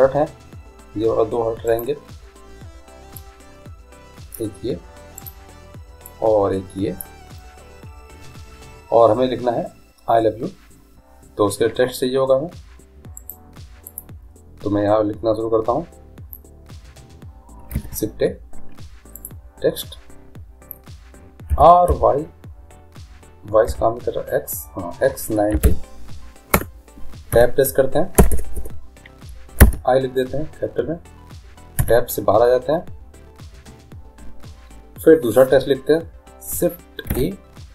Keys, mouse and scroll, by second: 1.9-3.6 right drag, 3.3-5.3 drag, 5.4-7.2 right drag, 6.2-8.2 drag, 13.3-15.0 right drag, 14.0-15.3 drag, 17.9 shift+a, 21.7 r, 27.5 Tab, 28.3 BackSpace, 28.8 BackSpace, 29.8 shift+i, 32.0 Tab, 37.1 shift+a.